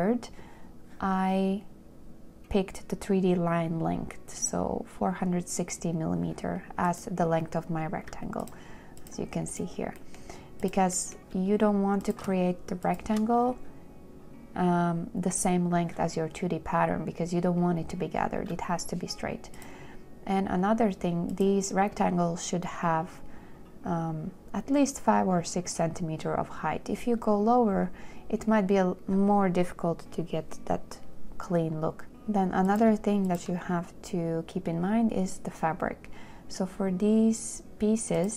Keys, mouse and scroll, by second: 13.1 shift+click, 32.0 a, 33.5 shift+click.